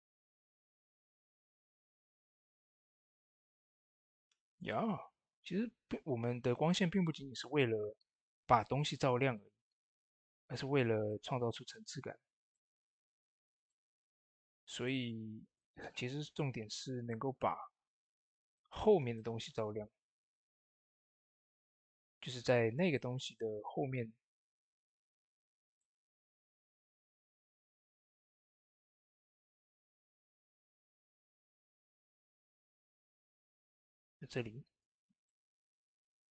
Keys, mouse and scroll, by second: 0.0 typing, 1.0 typing, 1.1-14.0 drag, 8.9 typing, 14.0 click, 14.0 scroll down 2, 14.3-15.4 shift+middle drag, 15.4-16.9 drag, 16.9 middle click, 17.9 click, 18.5 middle click, 19.5 scroll down 1, 20.0 ctrl+z, 22.0 typing, 22.8 middle click, 23.2 shift+middle click, 26.3 typing, 28.1-28.8 scroll down 2, 28.8 shift+middle click, 29.3 shift+scroll down 1, 30.1 shift+middle click, 31.8-36.3 drag, 32.7 click, 34.9-36.3 drag.